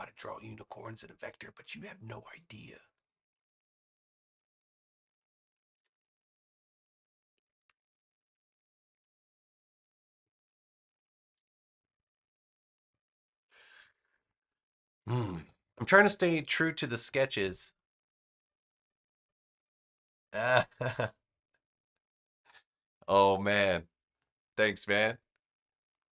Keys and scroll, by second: 5.6 v, 7.5 a.